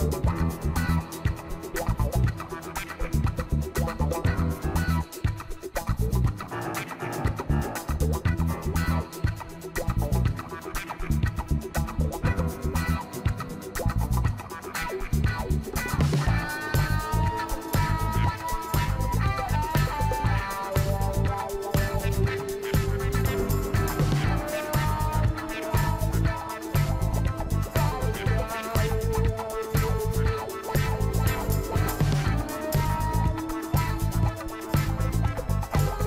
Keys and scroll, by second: 10.0 ctrl+m, 14.0 ctrl+l, 24.3 ctrl+l.